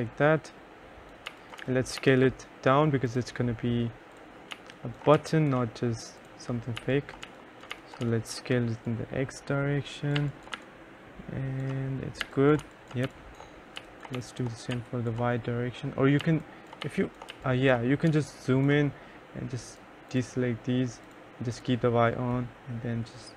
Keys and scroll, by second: 1.2-2.6 typing, 4.7 2, 5.3 3, 6.7-8.7 typing, 10.3 2, 10.7 3, 12.1-14.9 typing, 17.0 1, 17.4 2, 18.2 3.